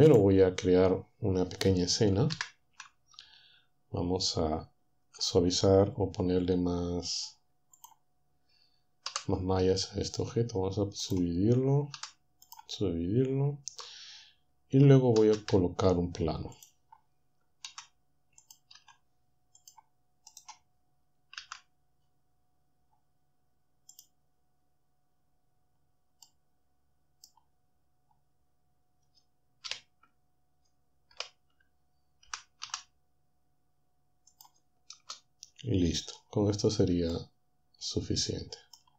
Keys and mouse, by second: 0.1 click, 2.4 ctrl+Up, 5.0 Tab, 7.8 click, 9.1 w, 11.0 click, 12.0 w, 12.5 click, 13.8 Tab, 15.2-16.1 typing, 17.7 typing, 18.8 typing, 20.0-21.4 typing, 24.0 click, 26.2 click, 26.3-27.4 middle drag, 29.7 3, 31.2 typing, 32.3-32.6 typing, 34.4 click, 35.0 typing, 37.2-38.9 shift+middle drag.